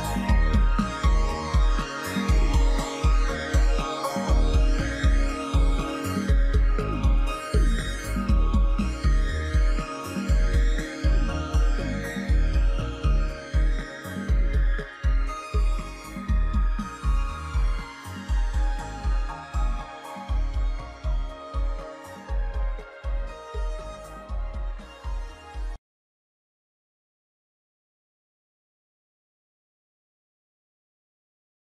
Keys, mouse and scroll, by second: 0.7 ctrl+-, 0.8 ctrl+-, 1.3 ctrl+-, 3.2 ctrl+-.